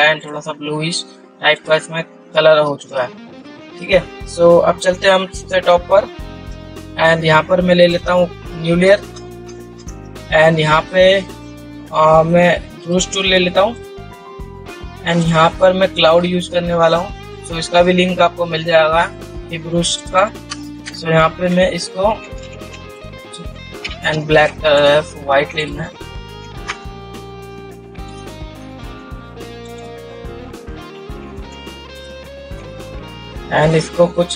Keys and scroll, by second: 24.7 ctrl+z.